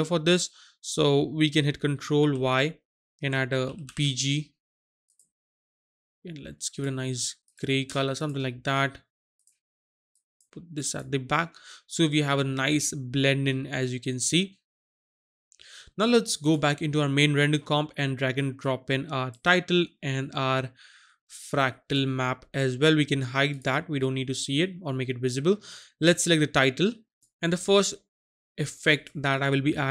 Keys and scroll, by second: 2.2 ctrl+y, 3.6 shift+b, 3.8 shift+g.